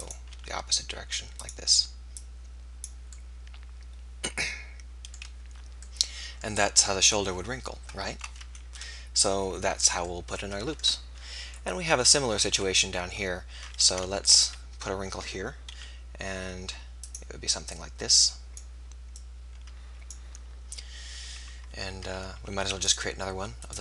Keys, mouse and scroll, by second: 0.2-1.4 drag, 0.2 r, 1.8 r, 2.2-4.1 drag, 8.8 KP_1, 12.6 KP_1, 13.8 ctrl+r, 17.1-20.9 drag, 22.6 ctrl+r.